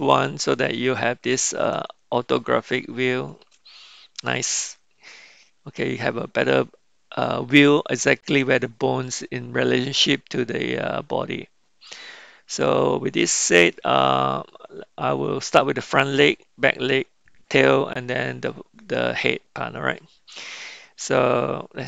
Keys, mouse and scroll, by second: 2.1-3.4 shift+middle drag.